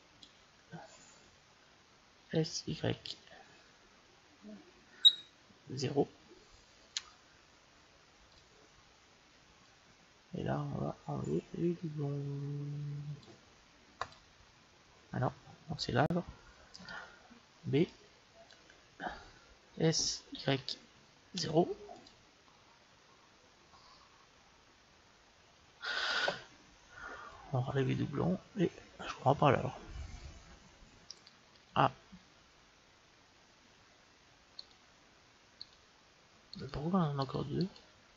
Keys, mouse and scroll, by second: 2.2 s, 9.5-11.3 drag, 11.3 click, 13.9-15.9 drag, 16.7 a, 17.5 b, 19.6 s, 27.2-28.9 drag, 31.6 a, 32.0 a, 34.5-38.1 right drag.